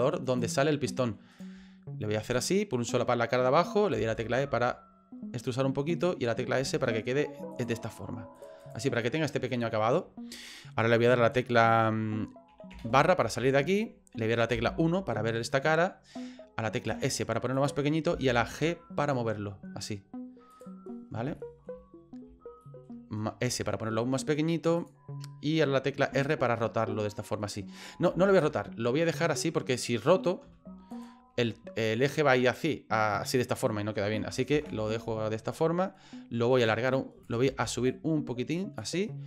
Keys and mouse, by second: 0.9 middle click, 1.3 right click, 2.3 middle click, 4.0 e, 6.6 s, 8.3 click, 9.0 middle click, 12.7 KP_Divide, 14.5 KP_1, 16.8 s, 18.1 g, 21.4 shift+middle click, 22.7 shift+middle click, 23.4 s, 26.1 r, 28.1 ctrl+z, 30.4 r, 34.5 ctrl+z, 36.6 click, 37.5 ctrl+z, 37.8 click.